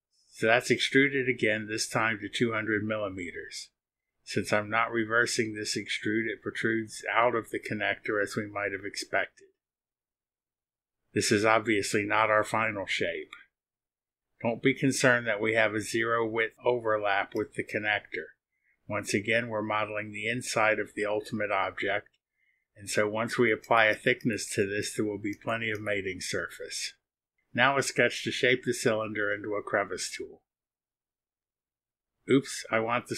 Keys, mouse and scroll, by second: 3.6 KP_2, 4.9 KP_0, 8.2 click, 11.0 click, 12.2-12.5 scroll down 2, 12.7 click, 13.0 scroll down 1, 19.5 click, 21.8 click, 22.3 click, 23.6 click, 29.7 click, 32.8 click.